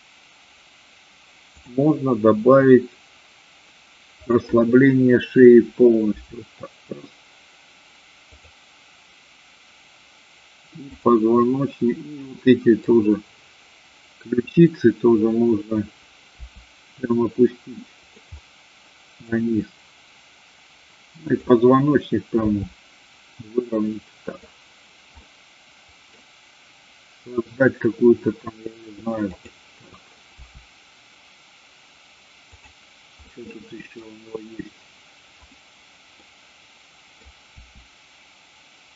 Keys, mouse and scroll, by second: 1.6 click, 6.1 r, 8.3 click, 10.8-11.8 drag, 12.2-12.8 middle drag, 16.3 r, 18.1 click, 18.3 middle click, 22.3 r, 24.3 click, 25.1-26.1 middle drag, 29.3-30.3 drag, 30.3 r, 32.6 click, 33.2-34.1 middle drag, 35.5-36.3 drag, 36.5-37.2 middle drag, 37.5 r.